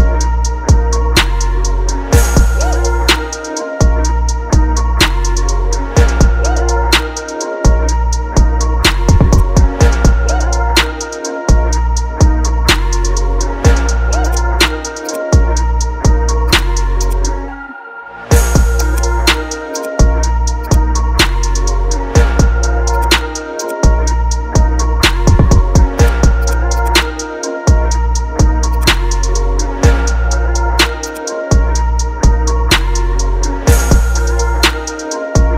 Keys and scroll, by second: 11.0 Return, 13.4 ctrl+t, 21.3 Return, 25.2 ctrl+d, 27.9 ctrl+j, 33.2 ctrl+alt+g.